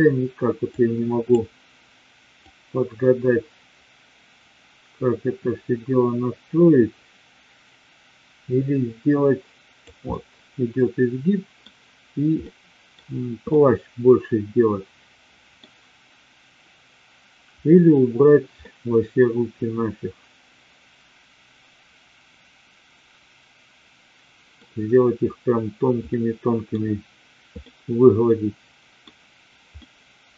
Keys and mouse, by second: 0.6-1.5 drag, 2.5-10.0 drag, 10.1-11.6 middle drag, 12.5-12.9 middle drag, 13.5-15.6 middle drag, 18.6-24.5 middle drag, 26.1-26.6 middle drag, 27.6-29.0 middle drag, 29.7-30.3 middle drag.